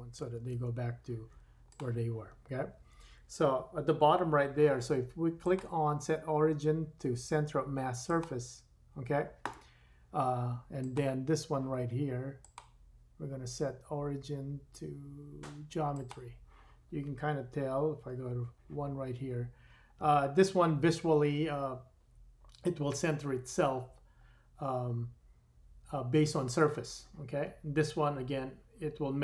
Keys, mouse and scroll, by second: 0.3 super+z, 0.6 super+z, 1.3-1.8 drag, 1.8-5.4 middle drag, 5.4-11.1 drag, 11.1-12.4 middle drag, 12.4-29.2 drag, 18.0 KP_1.